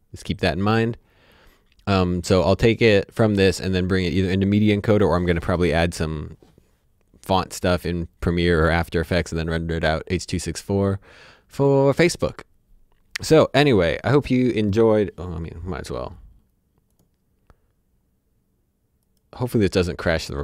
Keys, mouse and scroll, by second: 10.6-11.3 scroll up 1, 11.3 scroll down 1, 16.9 click, 19.0 click.